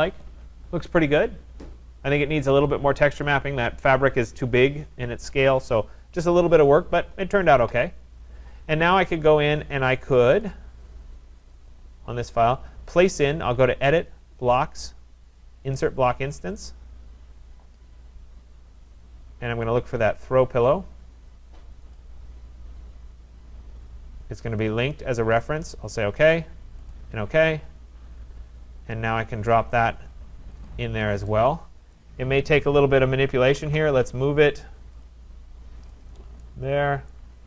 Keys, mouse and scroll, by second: 9.0 click, 10.5 click, 11.6 click, 13.1 click, 18.9 click, 20.7 click, 22.1 click, 25.7 click, 26.9 click, 30.7 click, 32.0 right click, 33.1-34.1 typing, 35.1 click, 36.0 click, 36.2 typing, 37.1 right click.